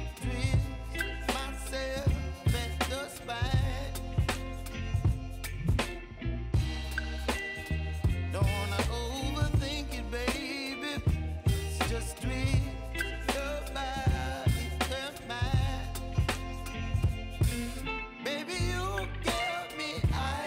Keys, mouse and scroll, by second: 3.5 click, 6.8 click, 9.4 click, 14.2 ctrl+alt+Home, 15.4-20.4 drag.